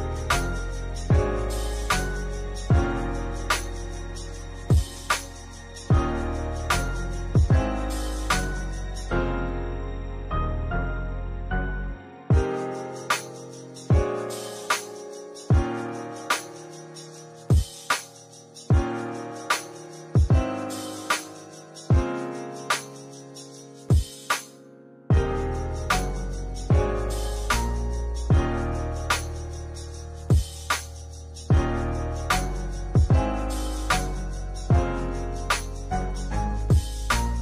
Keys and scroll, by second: 12.5 space, 21.3 space, 23.4 ctrl+z, 25.3 space, 29.6 space.